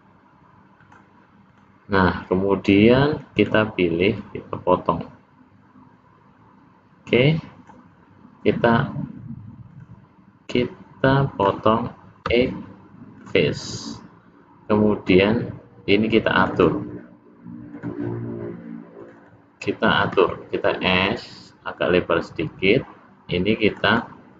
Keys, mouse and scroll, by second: 1.5 click, 3.3 click, 4.1 click, 9.7 click, 10.5 click, 12.3 x, 16.3 click, 16.5 click, 17.7 click, 18.9 click, 19.1 click, 20.1 s, 23.7 click, 23.9 click.